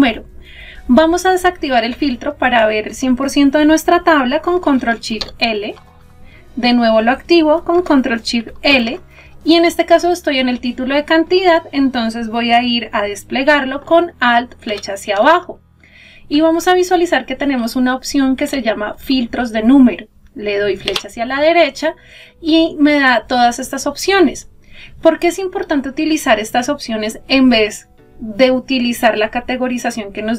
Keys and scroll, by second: 3.7 ctrl+shift+l, 14.0 alt+Down.